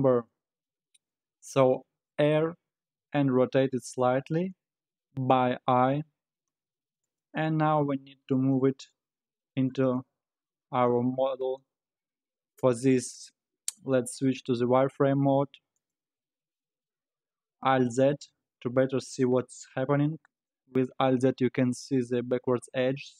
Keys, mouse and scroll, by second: 2.1 r, 14.6 z, 17.9 alt+z, 20.2 scroll down 2.